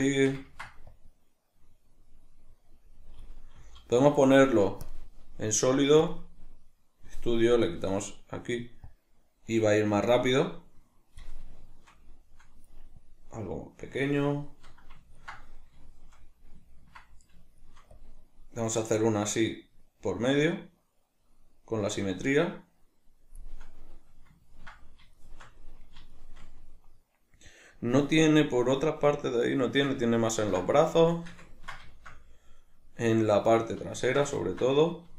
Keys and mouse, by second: 0.1-0.9 shift+middle drag, 0.9-11.6 drag, 3.6 z, 11.6-13.0 shift+middle drag, 13.0-14.5 drag, 14.5-17.9 shift+middle drag, 17.9-23.8 drag, 23.8-35.1 middle drag.